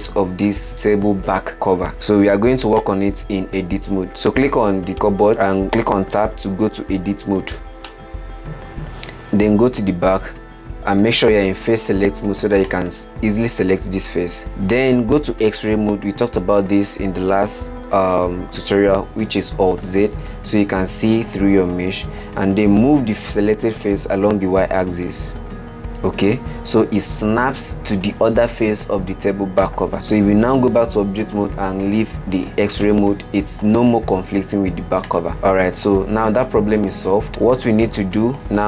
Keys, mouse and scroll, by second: 1.9-3.1 middle drag, 3.1 click, 4.9 middle click, 6.5 Tab, 8.3-11.4 middle drag, 13.0 click, 15.1-18.3 middle drag, 20.1 alt+z, 21.7-23.7 middle drag, 23.7 g, 30.5 Tab, 32.0 alt+z, 33.2-35.3 middle drag, 35.3 click, 35.5-36.4 middle drag, 36.4-37.4 scroll down 27, 37.7-38.6 middle drag.